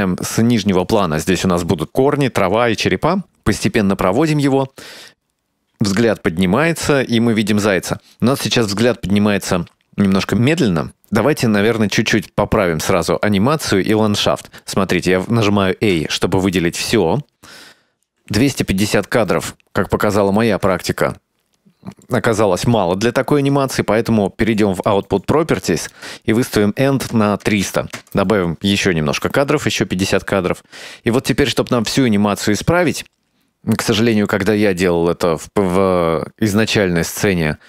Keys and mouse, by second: 3.2-8.2 drag, 12.8-14.8 middle drag, 16.1 a, 16.1 z, 18.8-20.2 ctrl+middle drag, 20.6 shift+middle click, 21.0-22.2 ctrl+middle drag, 24.7 click, 26.0-28.7 drag, 27.7 KP_0, 33.1-35.9 drag.